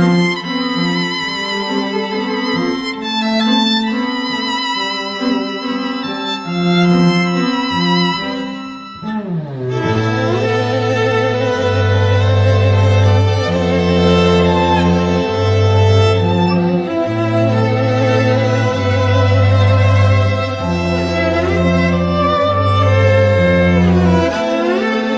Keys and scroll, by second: 10.8 z, 11.9 z.